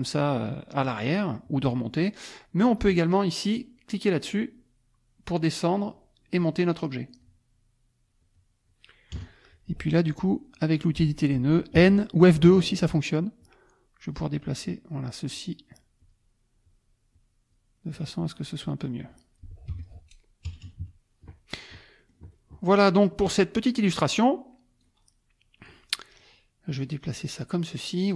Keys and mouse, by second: 1.4 click, 2.6 click, 4.3 click, 5.8 click, 6.3 click, 7.2 click, 8.4 click, 9.1 KP_Add, 9.6 click, 11.8 n, 12.6 click, 13.4 click, 14.6 click, 15.3 click, 16.0 click, 16.6 click, 17.1 click, 18.0 click, 19.1 click, 19.7 F1, 19.8 click, 20.5 KP_Subtract, 22.0 click, 23.8 click, 24.8-25.9 drag, 25.9 click, 26.8 click.